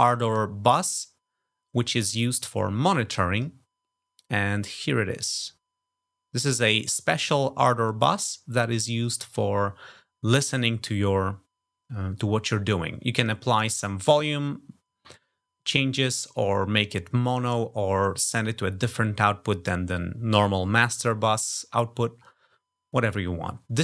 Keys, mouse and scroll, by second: 3.3 click.